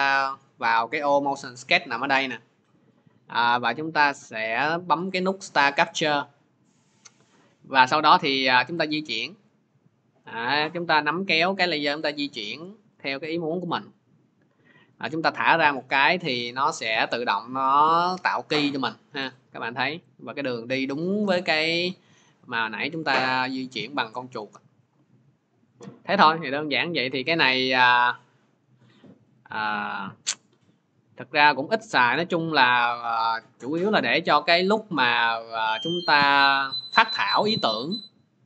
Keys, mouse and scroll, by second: 5.6 click, 6.2-10.7 drag, 13.5-18.6 drag, 26.1 click, 26.7 click, 27.6 click, 27.9 click.